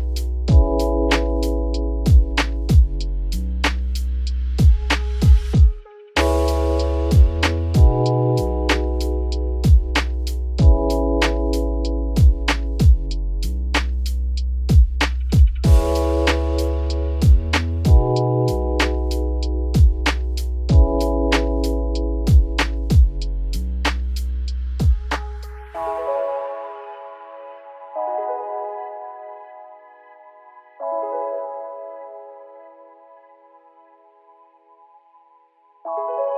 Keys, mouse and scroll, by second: 3.5 click, 16.7 h, 20.1 ctrl+z, 22.4 ctrl+z, 25.6 ctrl+shift+z, 26.9 h.